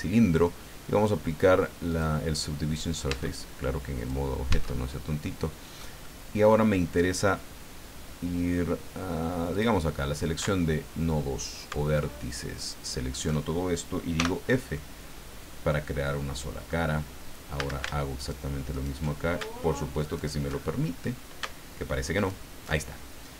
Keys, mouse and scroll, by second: 1.9 click, 3.1 Tab, 3.9 click, 4.5 Tab, 5.2 middle click, 6.0 middle click, 9.5 click, 9.9-10.3 scroll up 2, 10.5-11.5 shift+middle drag, 12.6 alt+shift+right click, 14.2 f, 14.7-16.9 right drag, 16.9 middle click, 17.1 scroll up 1, 17.6 a, 18.2 alt+shift+right click, 18.7 alt+shift+right click, 20.0 alt+shift+right click, 20.8 alt+shift+scroll up 2, 22.1 alt+shift+right click, 22.9-23.3 alt+shift+scroll down 3.